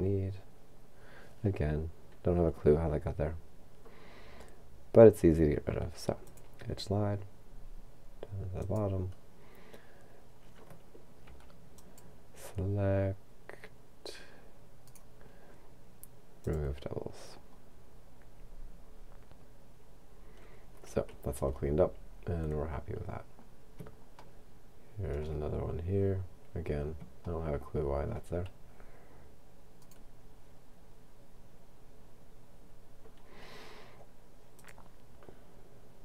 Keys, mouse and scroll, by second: 6.3 click, 8.6 click, 11.3 c, 11.8 click, 14.8 right click, 16.4 click, 20.2-21.7 scroll down 2, 24.5-26.0 shift+middle drag, 26.0-27.3 shift+scroll up 4, 27.3-29.0 shift+middle drag, 29.8 right click, 34.6 click.